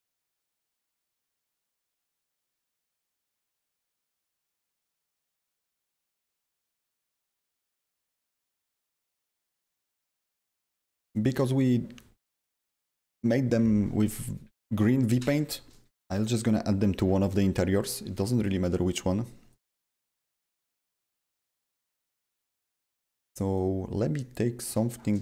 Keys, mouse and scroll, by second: 1.9 click, 1.9 click, 4.8 click, 14.3 click, 14.4-18.8 drag, 17.9 w, 18.8 w, 19.7 t, 20.6 click, 20.6 click, 21.1-21.9 typing, 21.2 click, 21.4 click, 21.7 click, 22.8 click, 23.5-25.2 drag, 24.9-25.2 typing.